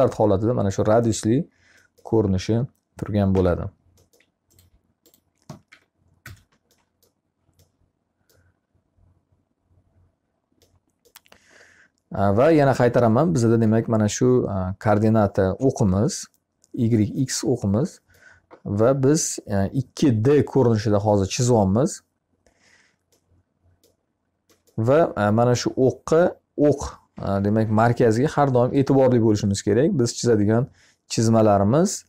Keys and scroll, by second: 2.8 Escape, 5.5 e.